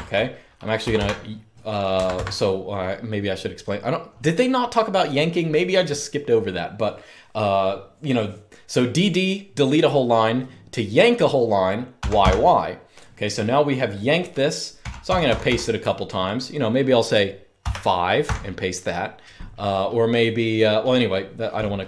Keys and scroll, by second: 0.0-1.0 typing, 1.8 Escape, 11.7 typing, 14.5-15.2 typing, 17.3-18.4 typing, 21.7-21.8 typing.